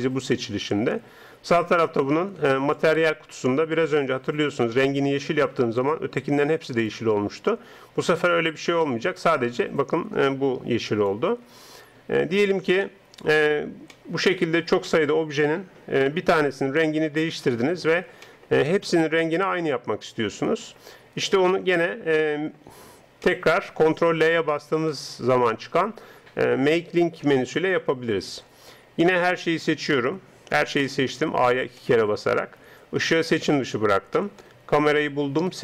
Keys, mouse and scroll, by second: 2.7-12.5 drag, 12.8-20.6 middle drag, 21.4 middle click, 29.7 a, 30.0 a, 30.4-33.0 middle drag, 33.0 right click, 34.3 middle click, 35.2 middle click, 35.5 right click.